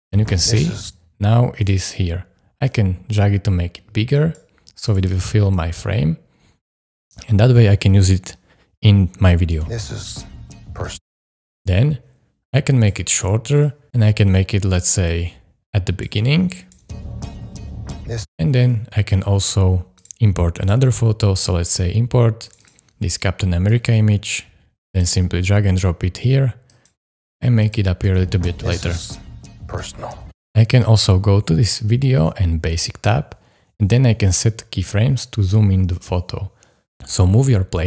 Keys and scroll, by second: 9.5 space, 10.9 space, 16.8 space, 18.2 space, 28.1 space, 30.2 space, 37.0 super+z.